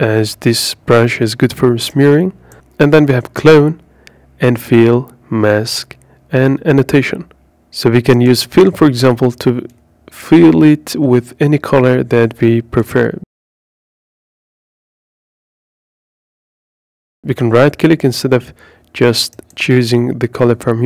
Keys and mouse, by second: 1.9 click, 2.7 click, 4.7 drag, 5.3 click, 8.7 click, 12.1 click, 16.9 click, 19.6-20.7 right drag.